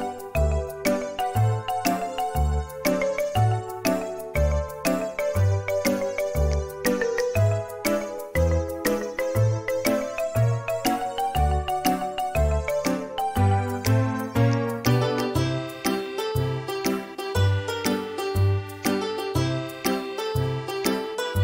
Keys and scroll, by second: 3.4 space, 7.3 m, 11.4 space, 15.0 space.